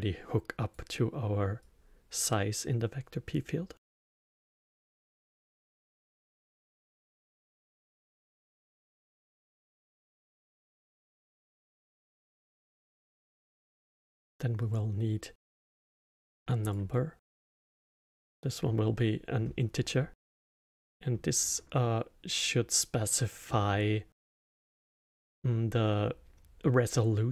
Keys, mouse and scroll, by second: 1.6-2.0 drag, 4.8-5.8 drag, 6.4 click, 7.1 click, 8.0 click, 8.9 click, 10.0 click, 11.2 click, 12.5 shift+a, 17.1-18.2 middle drag, 18.2 click, 20.5-24.7 middle drag, 24.7-25.1 scroll down 1, 25.1-27.3 middle drag.